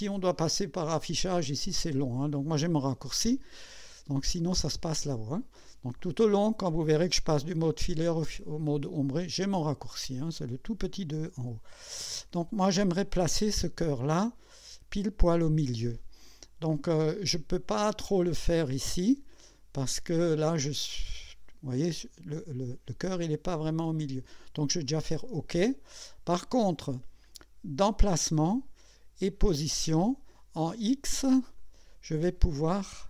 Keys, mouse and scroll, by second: 12.4 scroll up 2, 22.4-22.7 scroll up 2, 23.2 scroll down 2, 24.9 click, 28.0 click, 29.4 click, 31.6 click, 32.4 scroll down 2, 32.9 scroll up 2.